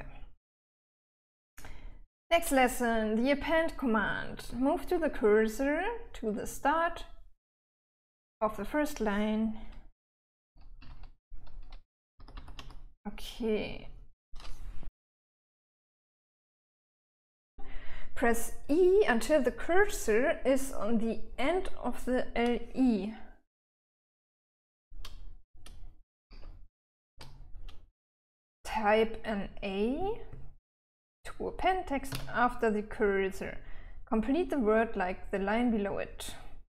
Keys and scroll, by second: 1.4 j, 1.6 j, 1.8 j, 10.4 k, 10.6 k, 10.7 k, 11.1 k, 12.2 h, 12.6 h, 12.8 h, 26.6 e, 27.4 e, 32.4 a.